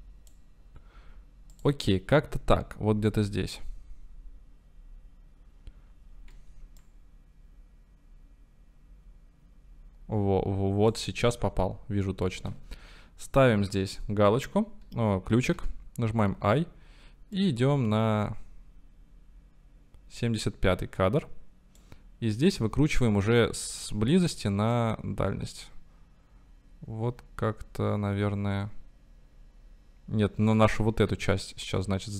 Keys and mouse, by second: 1.5 click, 6.9-11.0 drag, 15.6 i, 17.4 click, 17.5-18.6 middle drag, 22.0-24.8 middle drag, 30.7-32.1 middle drag.